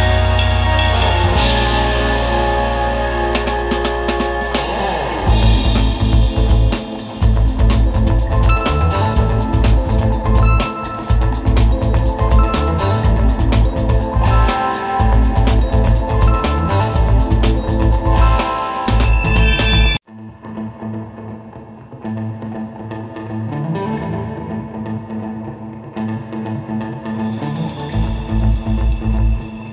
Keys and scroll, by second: 0.3 space, 0.7 space, 1.6 space, 4.0 space, 5.3 space, 5.8 space, 6.0 space, 8.5 super+space, 9.3 space, 9.8 space, 10.9 super+space, 21.5 super+[, 23.2 space, 26.6 space, 27.3 super+space, 27.8 space, 28.2 space.